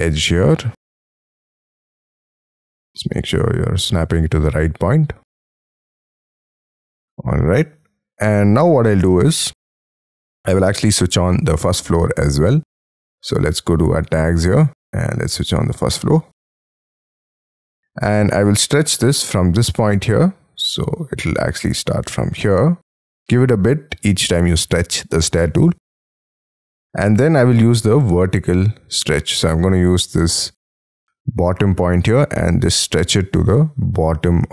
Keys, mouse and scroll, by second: 2.6 scroll up 6, 5.4-6.2 scroll down 13, 6.2 shift+middle click, 12.0-12.8 scroll up 3, 16.4 middle click, 17.1 middle click, 18.6 middle click, 20.5 scroll up 5, 20.7 middle click, 26.3 middle click, 32.3 middle click, 33.1 middle click.